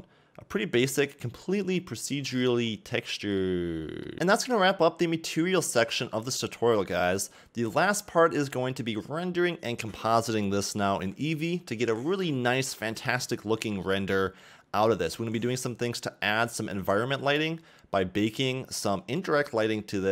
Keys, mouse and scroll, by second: 1.1 middle click, 2.4-3.3 scroll up 4, 3.4 middle click, 6.8 scroll down 2, 7.0 middle click, 14.4-16.0 scroll up 1, 17.7 middle click, 19.8 middle click.